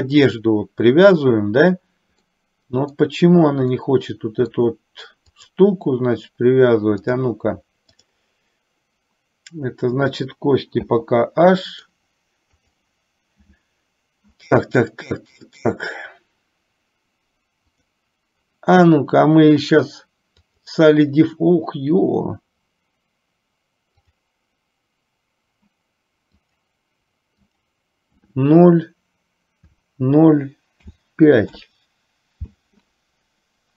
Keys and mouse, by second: 2.4-3.3 middle drag, 4.0-5.2 middle drag, 5.4 click, 7.2 click, 8.2 click, 10.9 h, 11.7-12.3 middle drag, 12.7 click, 17.8-20.9 drag, 24.3 click, 26.7-31.7 drag.